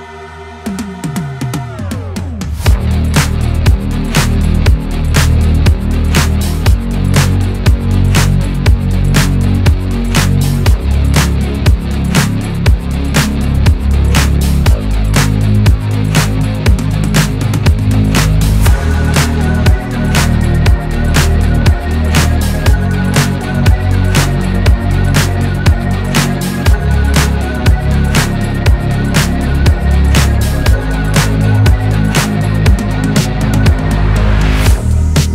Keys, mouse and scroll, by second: 0.9-1.9 drag, 1.9 scroll up 1, 2.1 shift+middle click, 2.3-4.7 drag, 5.0-6.6 drag, 6.6 scroll down 2, 6.7-8.1 middle drag, 8.1 n, 8.5 click, 8.7 scroll down 2, 8.8 shift+middle click, 9.6-11.3 scroll up 3, 9.9 KP_1, 11.6 click, 11.9 scroll down 1, 12.1 middle click, 12.4-13.2 scroll up 1, 13.2 shift+middle click, 13.7-15.1 drag, 15.1 scroll down 5, 15.4-16.6 drag, 17.9 middle click, 18.7 click, 19.5 scroll up 2, 20.0 scroll down 1, 20.3-21.6 drag, 21.6 scroll down 1, 21.8-23.3 middle drag, 23.3 scroll up 1, 23.7-24.9 middle drag, 25.5-27.8 drag, 30.7 scroll down 1, 30.9-32.0 middle drag, 32.0-33.2 drag, 34.0-35.2 drag.